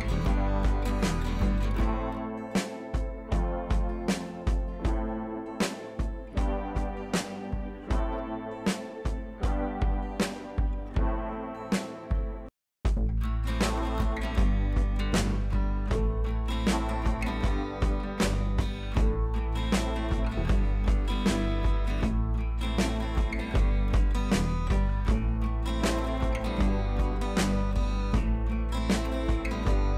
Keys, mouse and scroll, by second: 0.4-3.8 drag, 1.9-3.1 drag, 3.8 ctrl+t, 4.4 click, 5.2-5.7 alt+click, 6.4-6.7 alt+drag, 8.2 ctrl+t, 8.3 right click, 8.7 click, 9.2 right click, 9.9 click, 11.2-11.5 click, 11.5-12.0 scroll down 1, 12.0-13.5 drag, 13.6 scroll up 1, 15.2-16.3 drag, 19.1 right click, 19.8 click, 20.9 ctrl+shift+a, 22.7-23.6 drag, 29.2-29.9 drag.